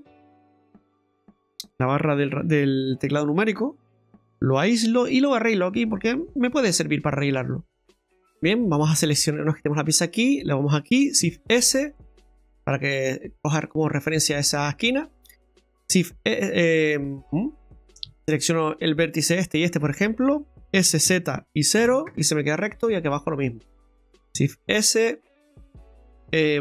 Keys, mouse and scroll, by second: 4.1 KP_Divide, 4.9 Tab, 5.4 right click, 6.6 Tab, 7.7 click, 8.0 ctrl+z, 8.2 middle click, 8.5-9.0 scroll up 4, 10.0 right click, 11.3 shift+s, 13.6 scroll up 1, 13.7 middle click, 14.2-15.0 scroll down 4, 15.0 right click, 16.0 shift+s, 19.5 shift+right click, 20.7 s, 23.5 right click, 24.5 shift+s, 25.5 right click.